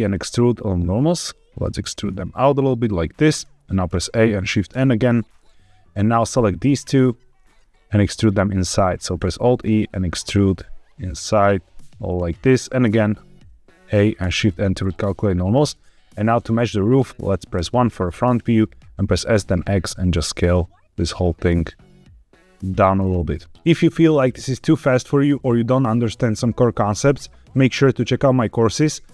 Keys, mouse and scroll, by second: 3.2 shift+click, 3.8 a, 4.6 shift+n, 6.1 click, 6.7 shift+click, 9.1 alt+e, 11.9 click, 12.8 a, 14.1 shift+n, 17.5 KP_1, 18.2-19.0 scroll up 2, 19.0 s, 19.2 x, 22.6 click, 22.9 middle click.